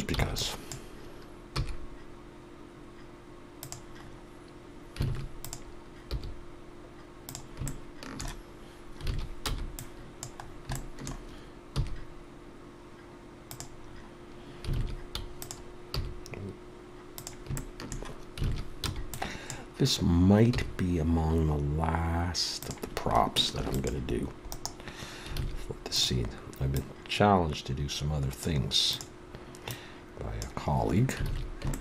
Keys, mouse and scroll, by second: 3.6 e, 4.0-4.6 scroll up 2, 6.1 alt+a, 6.1-6.8 scroll up 3, 7.2 g, 9.5 alt+a, 10.7 alt+a, 11.7 b, 13.5 e, 13.8-14.7 scroll up 2, 14.7 scroll up 1, 15.4 alt+a, 15.9 click, 17.2 g, 17.6 shift+middle click, 18.8 alt+a, 20.5 b, 23.8 ctrl+r, 25.9 alt+a, 28.4 click, 30.4 click, 31.7 alt+a.